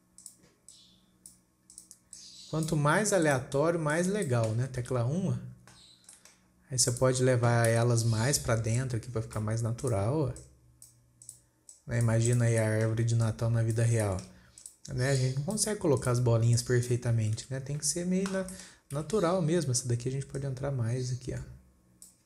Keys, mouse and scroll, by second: 0.6 click, 2.2 click, 2.6 click, 3.7 click, 4.3 click, 5.2 KP_1, 5.8 scroll down 2, 6.2-7.1 scroll up 9, 6.6 shift+middle drag, 7.4 click, 8.2 KP_7, 9.2 click, 10.3 click, 10.9 click, 11.7 click, 12.2 click, 12.7 click, 13.2-13.7 shift+middle drag, 13.7 click, 14.5 shift+middle click, 15.1 click, 15.6 click, 16.4 click, 17.0 click, 17.8 KP_1, 18.5-18.8 scroll down 3, 19.0-19.4 shift+middle drag, 19.4 KP_7, 20.0-20.3 scroll up 3, 20.8 click.